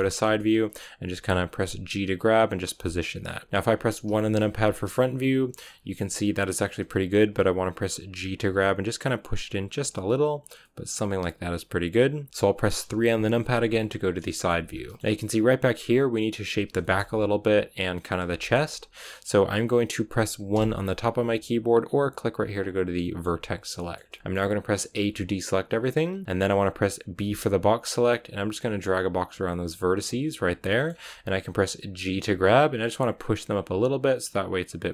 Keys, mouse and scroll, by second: 0.1-0.4 scroll up 4, 1.1 g, 4.0 KP_1, 5.2 scroll down 2, 5.5 scroll up 3, 6.8-8.0 scroll up 1, 8.0 g, 9.5 scroll down 4, 10.3-10.7 scroll down 1, 10.7-12.3 scroll up 3, 12.3-14.6 shift+middle drag, 14.6 scroll up 2, 15.0-20.4 shift+middle drag, 20.4 1, 22.5 click, 22.9-24.8 shift+middle drag, 24.8 a, 29.9 b, 30.6 shift+middle click, 30.8-31.4 scroll up 3, 32.0 g, 33.6-34.9 scroll down 1.